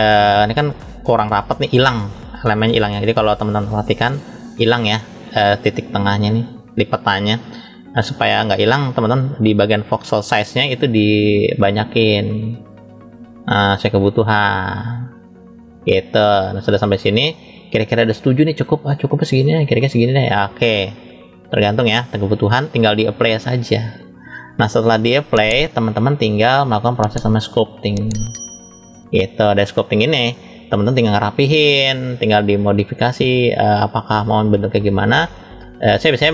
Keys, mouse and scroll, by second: 3.3 click, 7.5 drag, 10.5-21.5 drag, 22.5-23.5 drag, 23.9 click, 24.6-25.3 middle drag, 25.7 click, 27.0-28.2 drag, 30.3 click, 32.0-32.3 scroll down 2, 32.7 middle click, 34.1 scroll up 1, 35.1 scroll up 1.